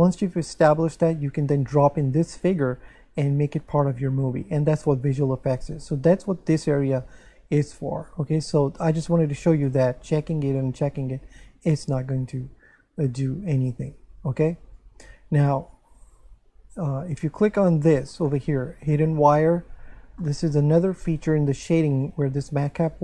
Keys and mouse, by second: 9.2 click, 14.7 click, 16.1 Tab, 17.2 Tab, 17.7 shift+middle click, 20.2 shift+middle click, 21.9 click.